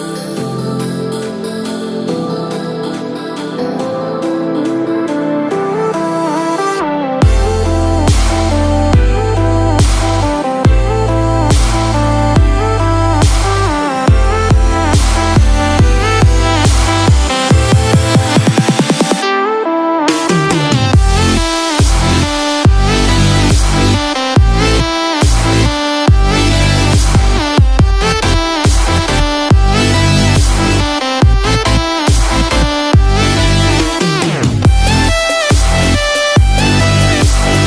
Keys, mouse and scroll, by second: 0.0 click, 3.2 click, 3.2 middle click, 3.2-3.7 scroll down 7, 13.8 click, 17.6 click, 19.2 click, 22.0 middle click, 22.0 click, 22.0-22.4 scroll down 3, 22.7 click, 24.1 click, 32.5 click.